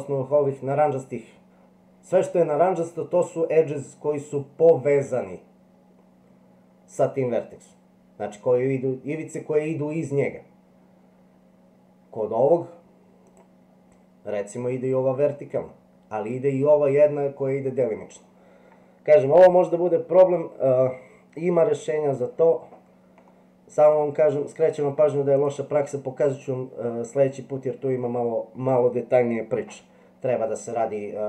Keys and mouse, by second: 13.2 click, 26.4-28.0 middle drag.